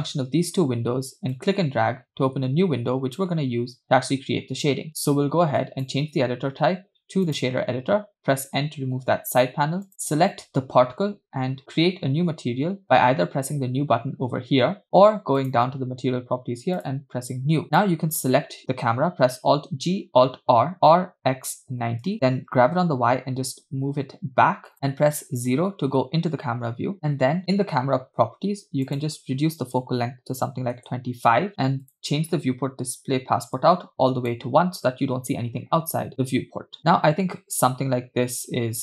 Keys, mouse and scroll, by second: 1.4-3.2 drag, 5.6-7.4 drag, 9.3 n, 9.9 click, 14.5-15.4 scroll down 2, 15.4 click, 16.8 click, 17.8 click, 19.7 alt+g, 20.5 alt+r, 21.0 r, 22.6 g, 25.2 KP_0, 28.9-30.8 drag, 31.9 click, 32.4 scroll down 2, 33.6 click, 36.1 space.